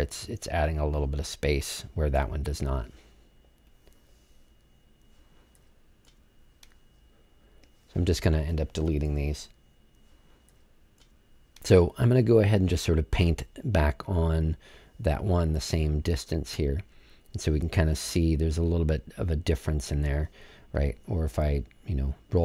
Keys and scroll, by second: 6.0 BackSpace, 8.2 BackSpace, 9.0 BackSpace.